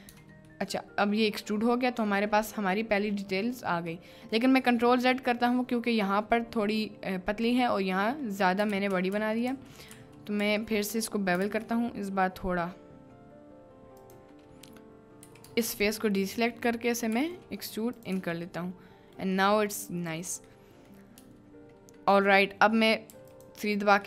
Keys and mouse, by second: 0.2 Tab, 0.5 middle click, 1.4 middle click, 2.2 middle click, 2.9-3.7 middle drag, 4.0 middle click, 4.8 middle click, 5.3 middle click, 8.1 click, 8.7 ctrl+z, 9.1 ctrl+z, 9.5 ctrl+z, 9.9 ctrl+z, 10.4 ctrl+z, 11.5 ctrl+b, 14.0 click, 15.2 3, 15.8-17.9 ctrl+drag, 17.3 e, 18.1 Tab, 18.6 middle click, 19.4 middle click, 19.7 click, 20.5 click, 23.1 3, 23.3 click.